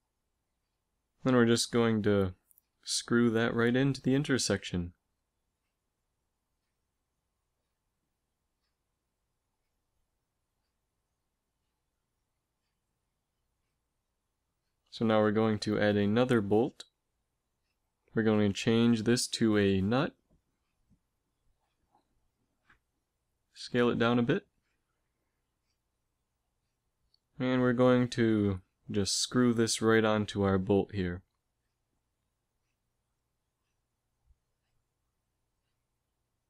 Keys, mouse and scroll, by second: 1.1 s, 2.5 g, 7.8-9.0 middle drag, 14.4 shift+a, 19.0 click, 23.0 s, 26.7 s, 28.3 r, 30.5 g, 34.5 middle click, 35.2 s.